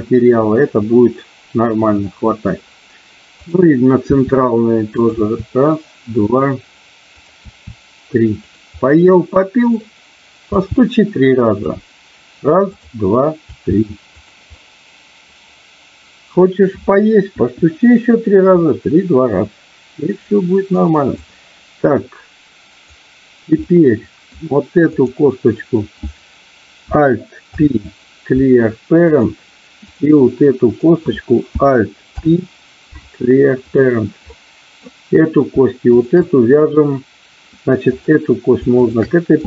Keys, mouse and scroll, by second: 0.7-2.4 middle drag, 4.1 e, 4.9 click, 5.1 e, 7.2 click, 8.7 e, 8.8-9.8 middle drag, 10.4 g, 11.3 click, 13.4 g, 14.1 click, 14.6-16.3 middle drag, 17.3 KP_1, 18.6-20.7 middle drag, 21.3-22.9 drag, 23.7 middle click, 24.9 click, 27.4 alt+p, 29.8 click, 30.2 middle click, 32.1 alt+p, 34.3 middle click, 35.9 shift+click, 37.8 click, 38.8 shift+click.